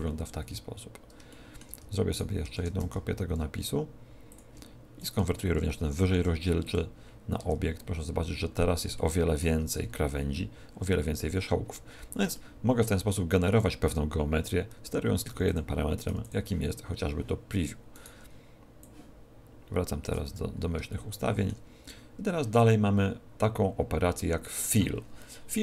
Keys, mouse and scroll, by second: 0.8-1.1 scroll down 5, 1.3 shift+middle click, 1.8 Tab, 2.1 right click, 2.5 shift+d, 4.3 ctrl+click, 4.9 right click, 5.9 alt+c, 7.3 Tab, 7.8-8.9 scroll up 10, 8.9 shift+middle click, 9.7 scroll up 1, 11.3-12.3 scroll down 13, 12.3 shift+middle click, 14.7 Tab, 15.3 x, 15.9 right click, 16.1 x, 17.9 right click, 18.7 click, 20.3-20.7 scroll up 4, 20.9 shift+middle click, 21.6-22.1 scroll down 1, 22.3 scroll down 1.